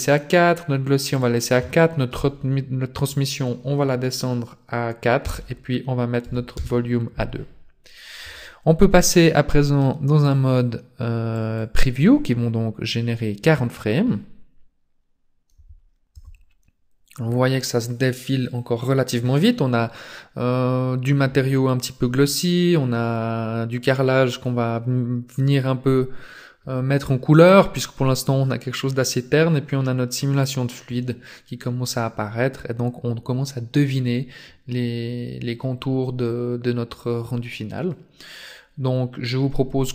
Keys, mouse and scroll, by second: 1.1 click, 10.2 click, 11.7 click, 25.5 scroll up 1, 26.1-26.6 scroll up 2.